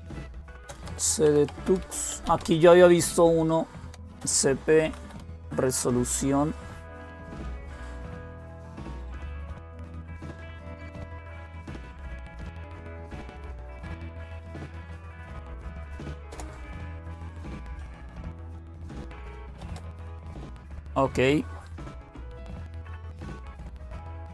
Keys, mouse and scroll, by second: 0.0-2.4 typing, 3.5-5.5 typing, 8.4-9.3 typing, 14.3 BackSpace, 16.1 Return, 17.0-17.9 typing, 19.0-19.8 typing, 24.0 click.